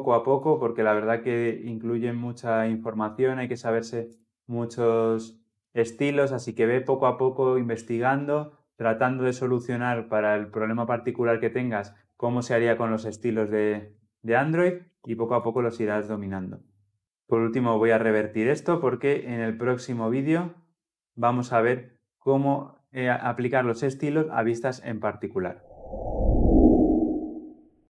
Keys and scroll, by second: 23.4 ctrl+alt+z.